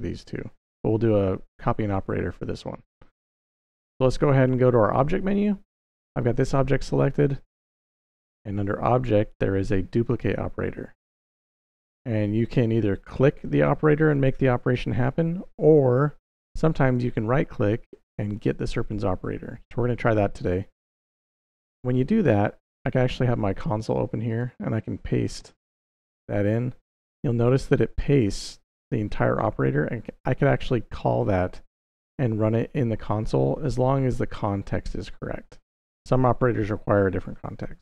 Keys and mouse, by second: 8.0-21.6 drag, 24.1 click, 25.2 ctrl+v, 37.4 Up, 37.7 Down.